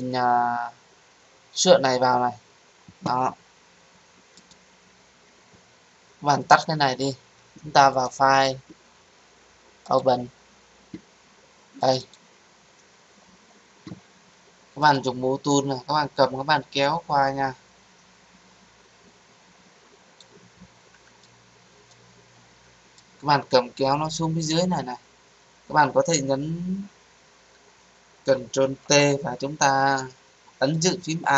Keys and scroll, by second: 28.8 ctrl+t.